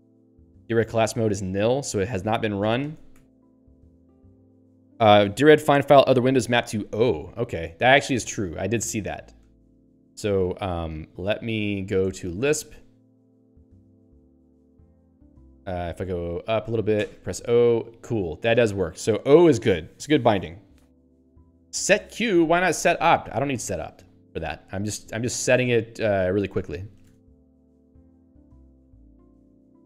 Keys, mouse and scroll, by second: 0.0-0.3 typing, 2.9 ctrl+g, 3.3 q, 11.4 ctrl+n, 12.2 Return, 14.0 ^, 16.2 ctrl+p, 17.1 o, 24.6 q, 28.0 Up.